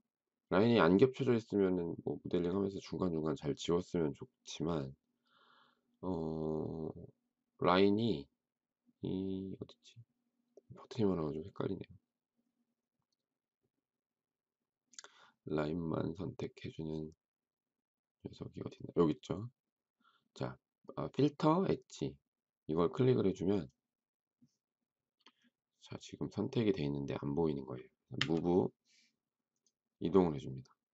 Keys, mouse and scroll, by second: 28.1 m.